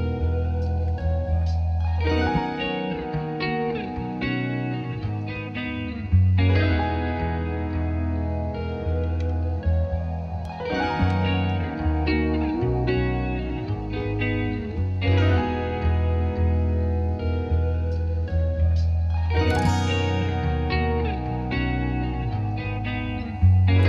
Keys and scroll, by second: 5.8-7.0 typing, 7.1 Return, 15.2-16.6 typing, 17.0 Return.